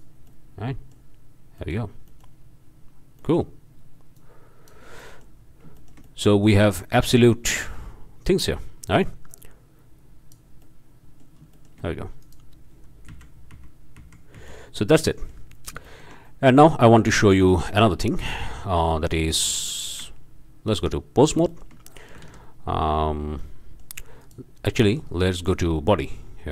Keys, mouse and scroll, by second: 0.3-1.1 drag, 1.6-1.9 drag, 2.1-2.4 drag, 3.2 click, 4.1 click, 5.0-5.4 drag, 5.5 click, 5.8-6.7 shift+drag, 9.0-10.5 drag, 10.6-11.4 drag, 11.5-11.9 shift+drag, 12.2 shift+click, 13.1 m, 14.8 middle drag, 15.2 click, 15.6 middle click, 15.6 drag, 15.9-16.2 shift+drag, 16.3-16.7 shift+drag, 16.7 shift+scroll down 1, 17.0-17.3 shift+drag, 17.5 shift+drag, 18.2 click, 20.0 Tab, 21.5-21.8 shift+drag, 21.9 shift+click, 22.2 alt+shift+a, 23.4 click, 24.2 drag, 24.8 Tab, 25.5-26.0 drag, 26.1-26.5 scroll down 1.